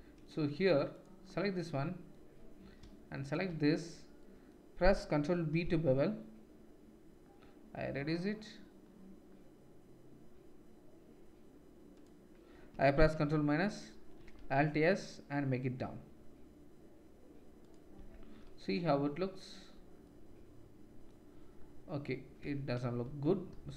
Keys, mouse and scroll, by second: 0.9 click, 3.2 ctrl+shift+click, 5.5 ctrl+b, 13.2 ctrl+KP_Subtract, 14.3 alt+s, 18.0 Tab, 18.4-23.7 drag, 22.4 Tab, 23.1 ctrl+z, 23.5 ctrl+z.